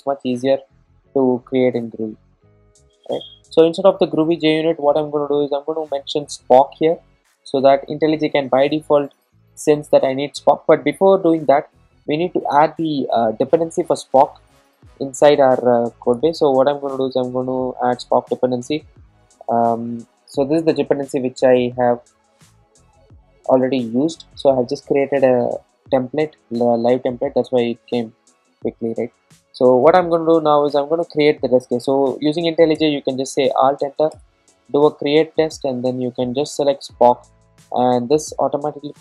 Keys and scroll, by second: 18.1 Return, 32.8 alt+Return, 34.3 alt+Return.